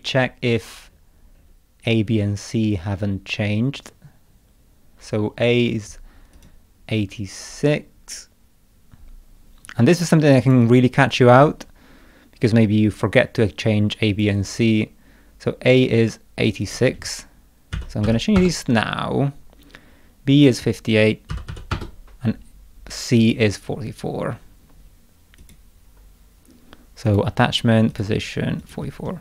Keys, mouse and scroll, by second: 0.5-1.1 scroll down 2, 1.4 scroll down 1, 2.0-2.4 scroll down 1, 2.7-4.3 scroll down 5, 6.4 click, 10.4 click, 12.4 scroll down 1, 14.1 click, 14.5 scroll down 1, 16.6 click, 20.5 click, 23.2 click, 25.4 click, 27.1 click, 27.9 click, 28.6 click.